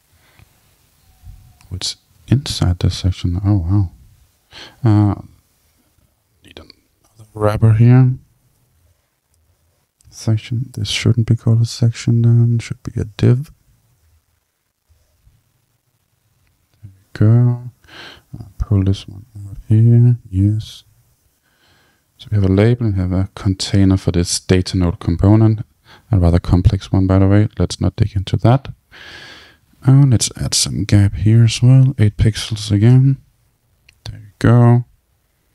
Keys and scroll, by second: 9.0 Return, 32.6 Return.